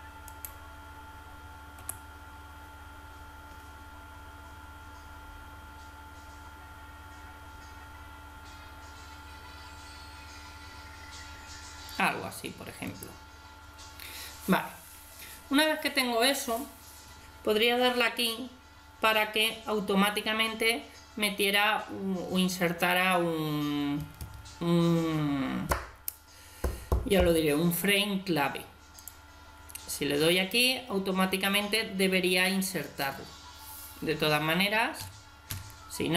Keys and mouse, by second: 0.3 right click, 1.8 g, 29.0-30.8 drag, 30.8 middle click, 35.0 a, 35.5 a.